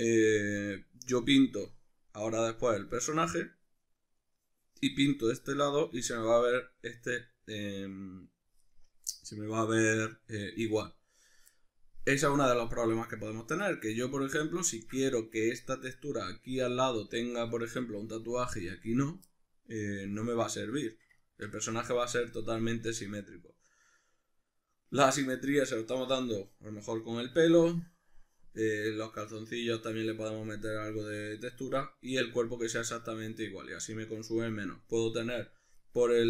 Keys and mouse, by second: 0.5 Tab, 5.2-13.3 middle drag, 13.3 click, 14.0 click, 14.8-36.2 ctrl+middle drag.